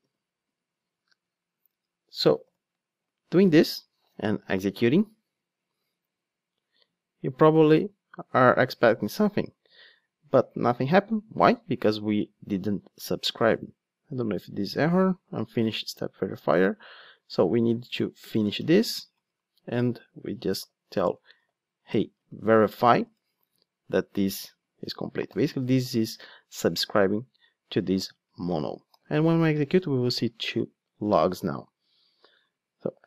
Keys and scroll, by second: 0.0 super+v, 3.3 ctrl+d, 22.2 ctrl+space, 23.0 Return, 28.9 ctrl+d.